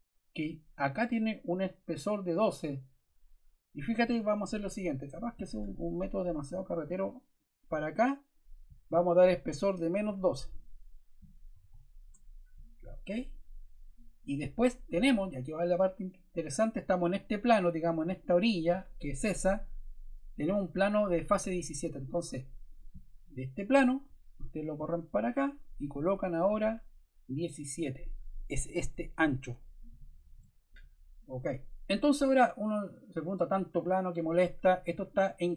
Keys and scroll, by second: 11.2-12.1 typing, 29.4 1, 29.8 7, 30.3 Return.